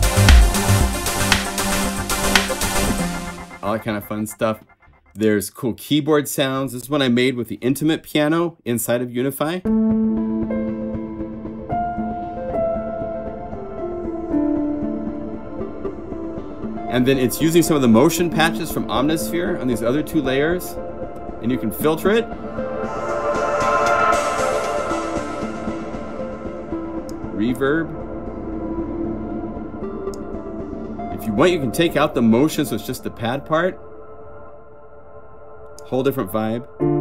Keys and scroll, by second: 2.8 F3, 35.6 F4, 35.6 F5, 36.9 F4.